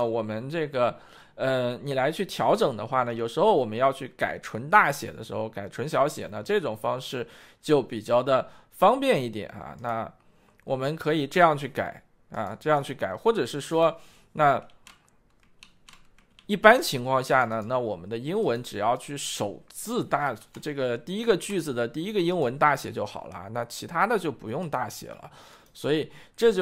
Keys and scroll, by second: 21.3 shift+Return.